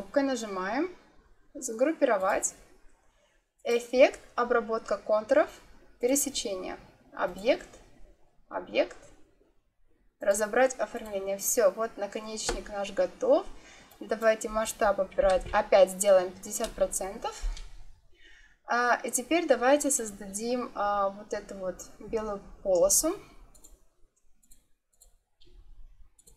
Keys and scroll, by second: 15.1 5, 15.3 0, 16.5 Return.